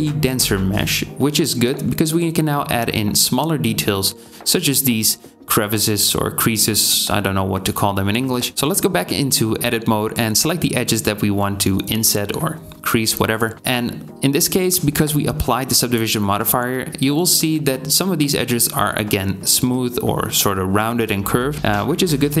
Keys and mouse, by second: 1.9 KP_3, 3.7-5.4 alt+drag, 11.4 s, 17.4 alt+click, 18.1 s.